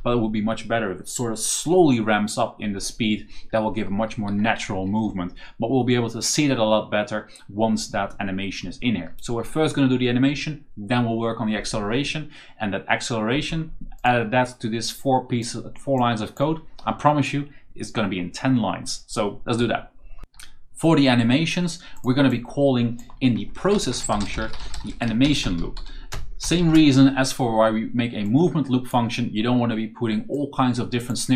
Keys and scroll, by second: 3.3-5.4 typing, 23.6-26.9 typing, 28.1 o.